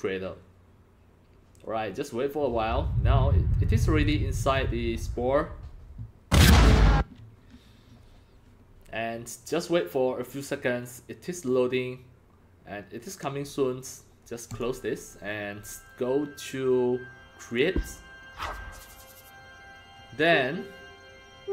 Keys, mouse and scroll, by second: 6.8 Escape, 14.5 click, 17.5 click.